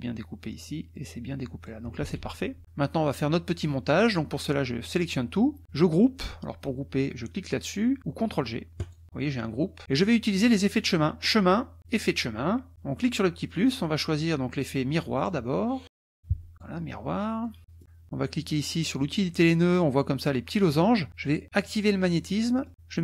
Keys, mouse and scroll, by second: 0.9-1.8 drag, 2.0 ctrl+z, 4.0-5.0 drag, 8.8 click, 10.3 click, 12.0 click, 13.0 click, 15.2 click, 15.6-16.7 typing, 16.5 click, 17.4 middle click, 19.0 click, 21.7 click, 22.2 middle click.